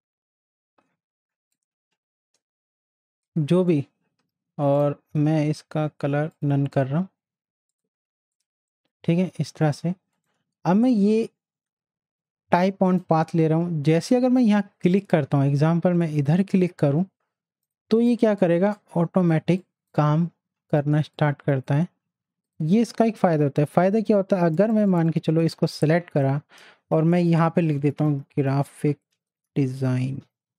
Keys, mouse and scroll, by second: 10.1 right click, 12.8 right click, 12.9 click, 16.3 click, 18.2 z, 18.7 click, 19.4 space, 19.6-22.4 drag, 23.8 t, 24.5 click, 27.5-30.5 typing.